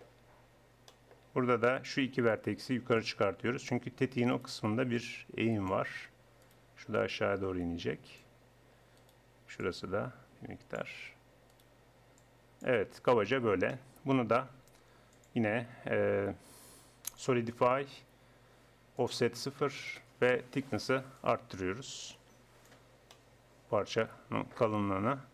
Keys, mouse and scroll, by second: 3.0-4.2 middle drag, 4.2 click, 4.4-6.9 middle drag, 6.9 click, 7.1-8.7 middle drag, 8.7 click, 9.6-10.8 middle drag, 10.8-12.2 drag, 12.9 middle click, 13.3 Tab, 13.7 middle click, 14.0 middle click, 14.2 middle click, 19.0-20.7 drag, 21.2-22.9 drag, 22.9 middle click.